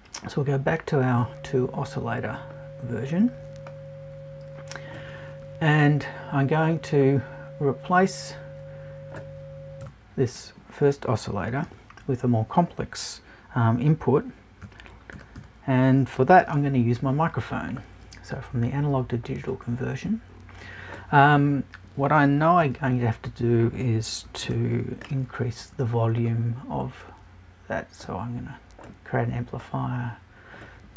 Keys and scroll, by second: 9.8 BackSpace.